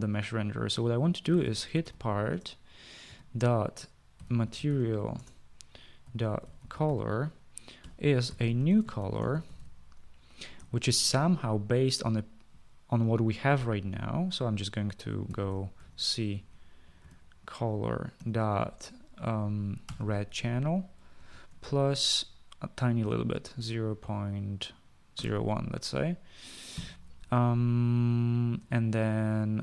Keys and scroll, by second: 1.5-11.3 typing, 15.5-17.3 typing, 18.6 typing, 20.3 typing, 21.8 typing, 23.5-23.9 typing, 25.0-25.6 typing.